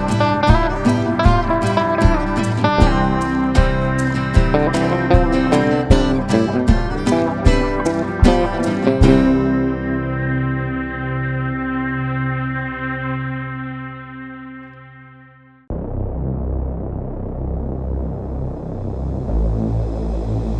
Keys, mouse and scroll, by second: 16.9 KP_2, 17.0 KP_0, 17.2 KP_1, 17.5 KP_7, 18.9 click.